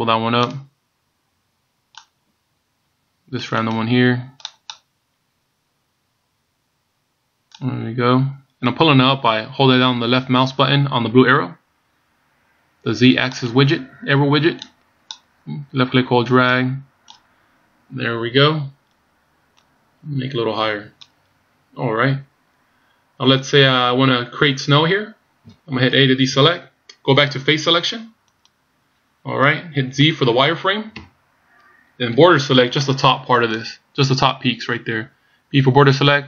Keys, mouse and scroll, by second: 0.6 click, 3.6 right click, 4.6 click, 13.5 right click, 14.8 click, 19.7 click, 26.4 a, 28.5 click, 31.1 z, 32.2 b.